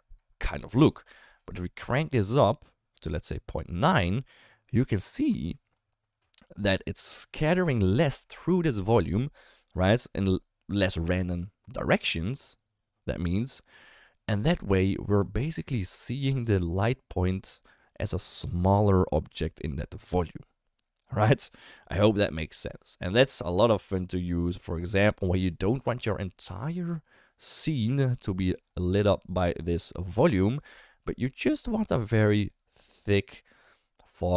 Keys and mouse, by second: 2.4-5.1 drag.